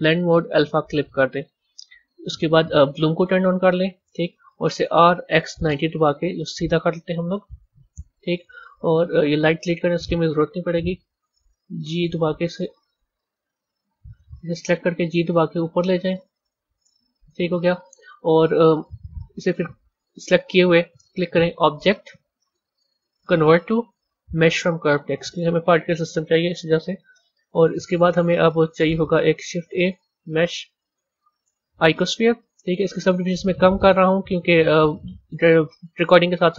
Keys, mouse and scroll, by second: 3.2 click, 4.8 r, 7.3 KP_1, 7.6-8.5 scroll down 3, 8.5-9.6 scroll down 2, 9.6 click, 10.6 Delete, 11.6 g, 13.1 click, 14.0 click, 15.0 g, 21.3-24.4 drag, 28.7 a, 29.4 shift+a, 32.9 click, 33.7 click, 34.9 click.